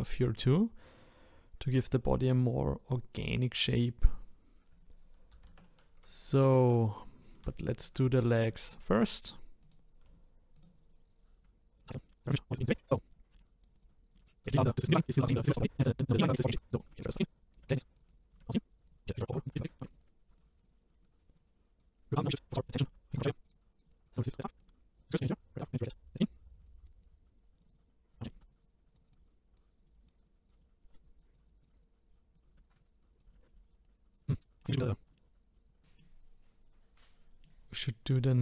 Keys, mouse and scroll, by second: 0.3 click, 5.3 ctrl+z, 6.2 shift+middle click, 7.1-7.5 scroll down 1, 8.2-8.6 scroll up 1, 8.6 shift+middle click, 9.6 click, 10.5 shift+click, 11.9 click, 12.0 scroll up 3, 12.0 shift+middle click, 12.2 scroll down 1, 12.7 click, 13.1 click, 13.3 shift+middle click, 13.4 click, 13.9 click, 14.1 shift+middle click, 14.5 scroll down 1, 14.6 middle click, 15.2 click, 16.0 middle click, 16.5 click, 16.8 shift+middle click, 16.9 scroll up 2, 17.1 click, 17.6 shift+middle click, 17.7 click, 17.9 click, 18.3 shift+middle click, 18.8 click, 18.9 click, 18.9 click, 19.3 shift+middle click, 20.0 click, 21.0 click, 22.0 scroll up 2, 22.3 click, 22.5 shift+middle click, 23.2 click, 23.5 click, 25.1 click, 25.6 click, 26.3 click, 26.6 click, 28.2 scroll down 2, 28.3 shift+middle click, 28.9 click, 29.8 middle click, 30.0 click, 30.2 click, 30.2 click, 30.6 middle click, 31.6 click, 32.2 scroll up 1, 32.3 click, 32.7 click, 33.3 shift+middle click, 33.8 click, 34.2 middle click, 34.3 click, 34.4 middle click, 34.6 scroll down 2, 34.8 middle click, 35.0 click, 35.0 middle click, 35.2 scroll down 1, 35.2 middle click, 35.7 click, 36.0 middle click, 36.3 middle click.